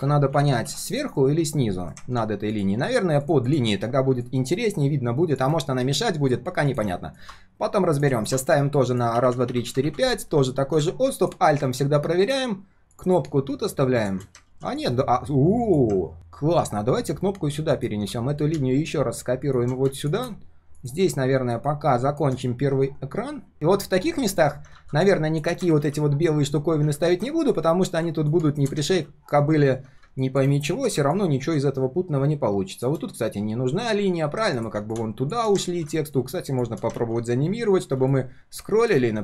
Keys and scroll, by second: 0.9 ctrl+shift+], 14.5 ctrl+s, 25.8 ctrl+z, 29.0 ctrl+z, 35.7 ctrl+z, 37.0 ctrl+z.